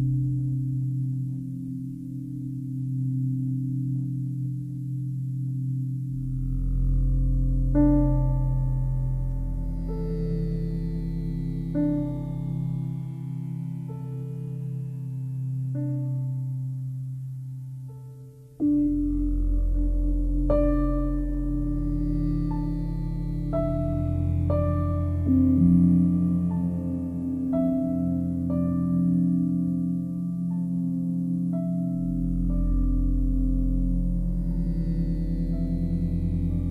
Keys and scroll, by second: 7.6 space, 27.6 space, 35.1 ctrl+d.